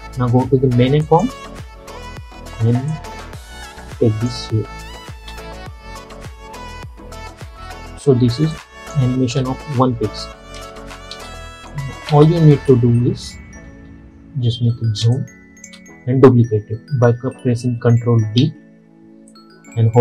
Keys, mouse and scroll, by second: 5.2 space, 7.5 space, 8.6 click, 9.3 space, 13.7-14.7 alt+scroll up 1, 15.1 space, 15.2 click, 15.6 space, 18.5 ctrl+d.